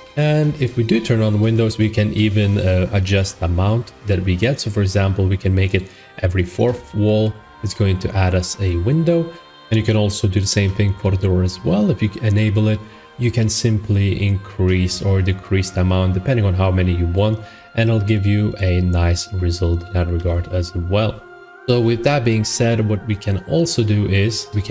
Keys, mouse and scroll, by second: 0.1 middle click, 1.3 click, 2.4 middle click, 5.7 click, 6.4 middle click, 7.1 middle click, 8.1 middle click, 8.3 middle click, 8.5 scroll, 10.8 click, 17.0 click, 18.4 middle click, 19.7 click, 20.1 4, 21.4 click, 22.2 middle click.